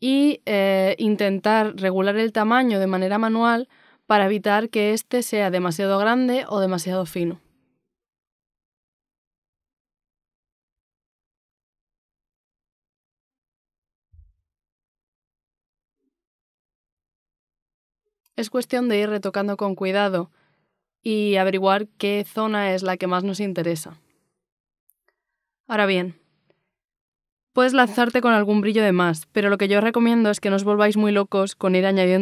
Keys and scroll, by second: 20.6 x, 21.6 z, 21.9 x, 23.5 z, 25.0 z, 26.9 z, 28.3 z, 28.8 x, 29.6 z.